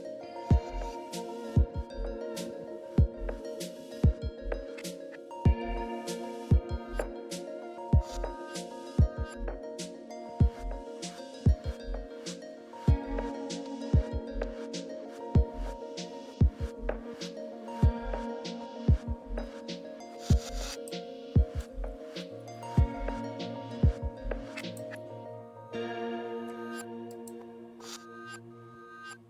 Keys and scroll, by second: 9.4 e, 17.2 alt+Tab.